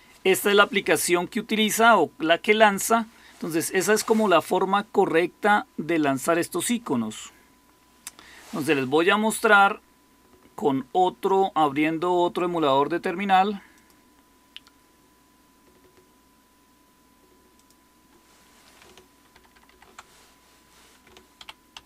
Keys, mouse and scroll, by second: 0.9-2.0 typing, 2.1-2.6 Left, 19.2 ctrl++, 19.4 ctrl++, 19.6 ctrl++, 21.3 ctrl+-, 21.6 ctrl+-.